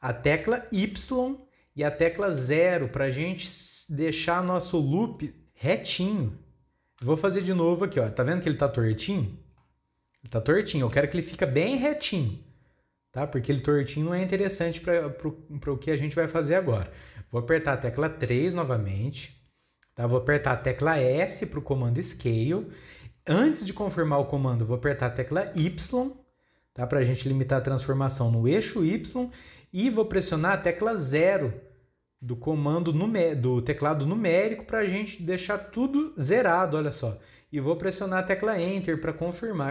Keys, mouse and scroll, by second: 5.9 scroll down 1, 6.0-7.4 middle drag, 7.4 ctrl+z, 8.5-11.8 middle drag, 11.8 scroll down 2, 11.8-15.1 middle drag, 18.4 KP_3, 19.3 scroll up 2, 21.1 s, 39.3-39.7 scroll down 3.